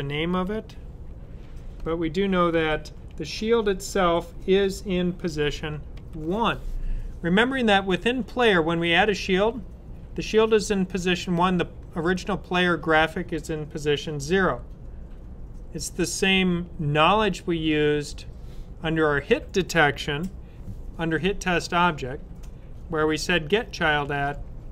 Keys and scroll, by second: 1.4 typing, 5.3 shift+0.